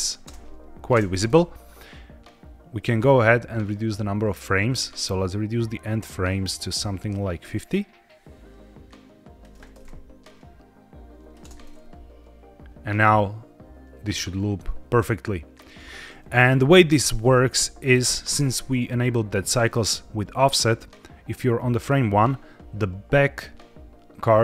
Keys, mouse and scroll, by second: 0.0-0.8 typing, 1.6 click, 4.9-9.4 drag, 10.1-11.3 drag, 11.3 space, 14.2-14.6 scroll up 3, 16.4-17.1 scroll up 3, 17.2 shift+middle click, 18.2 space, 19.6-21.8 drag.